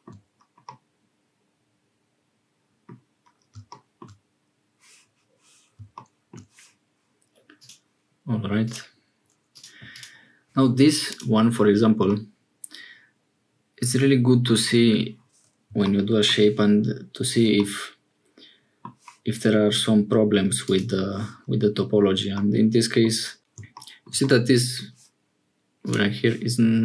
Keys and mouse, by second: 0.7-3.0 middle drag, 7.7-11.5 drag, 12.1-14.5 middle drag, 17.6-18.9 middle drag, 20.7 middle click, 23.4 Tab, 24.2 middle click.